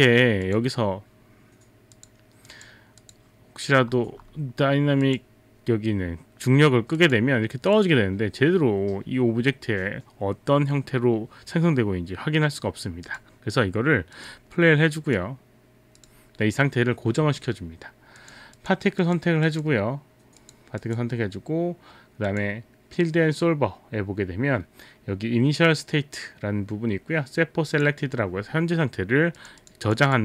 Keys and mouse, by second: 0.4 click, 2.0 click, 2.5 click, 3.0 click, 5.0 click, 7.0 click, 7.8 click, 14.1 click, 15.0 click, 18.2 click, 18.6 click, 20.8 click, 22.3 click, 27.7 click, 29.4 click, 29.7 click, 29.9 click, 30.1 click.